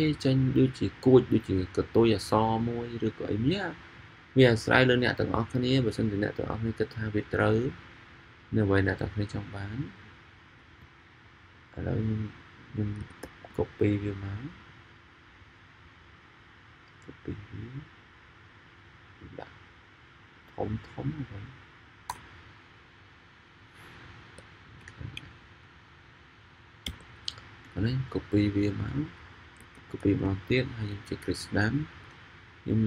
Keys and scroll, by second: 12.9 super+c, 13.2 super+v, 29.7 super+c, 30.0 super+v.